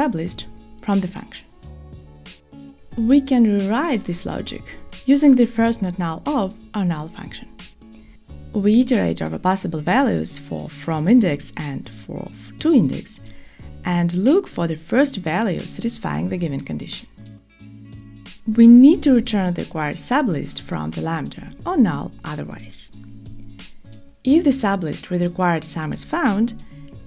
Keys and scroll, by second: 0.9 Escape, 5.9 Return, 25.3 alt+shift+Right.